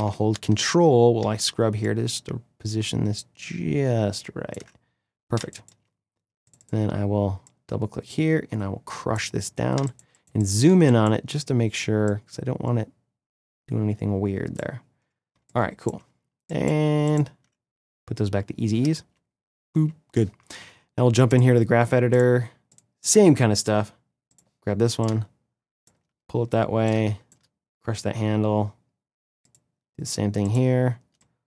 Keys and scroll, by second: 5.1 space, 9.5 space, 15.0 space, 18.6 space.